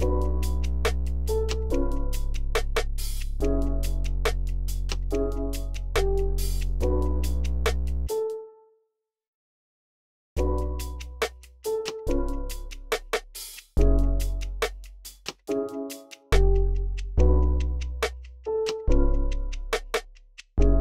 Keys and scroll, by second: 0.0-2.6 typing, 4.4 x, 6.7 super+w, 8.0 space, 10.2 space, 11.6 v, 17.4 alt+super+s, 18.6 x.